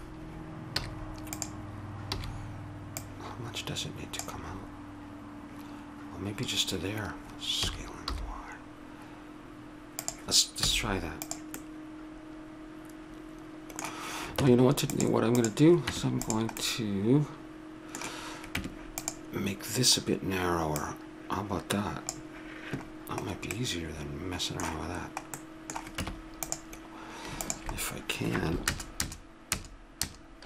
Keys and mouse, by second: 0.7 z, 2.1 b, 4.5-6.6 middle drag, 7.6 s, 10.6 z, 11.6-13.1 middle drag, 14.4 Tab, 15.4 right click, 15.9 Tab, 16.6-17.6 middle drag, 18.6 Tab, 20.8-22.6 drag, 23.5 middle click, 26.0 Tab, 27.4-28.6 right drag, 28.6 ctrl+KP_Add, 29.0 ctrl+KP_Add, 29.5 ctrl+KP_Add, 30.0 ctrl+KP_Add.